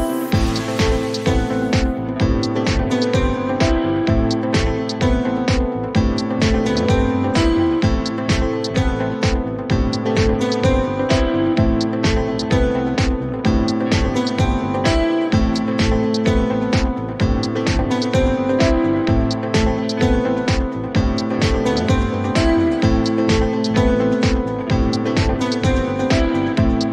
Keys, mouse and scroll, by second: 3.5 click, 6.8 click, 8.2 click, 11.0 click, 11.6-12.1 typing, 13.0 Return, 14.7 click, 15.2-17.5 typing, 16.5 Return, 19.4 click, 19.7-21.0 typing, 21.4 Return, 24.3 click, 24.9 typing, 25.4 Return.